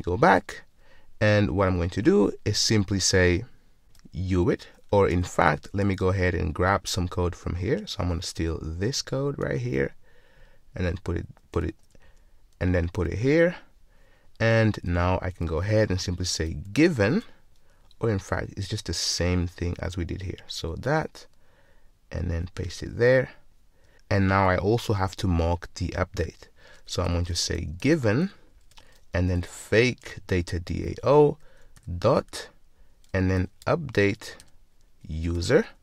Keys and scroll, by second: 9.5 super+c, 11.4 super+v, 11.7 super+z, 13.1 super+v, 17.2 Return, 17.3 Return, 20.8 super+c, 22.8 super+v, 28.7 Return, 35.3 Return.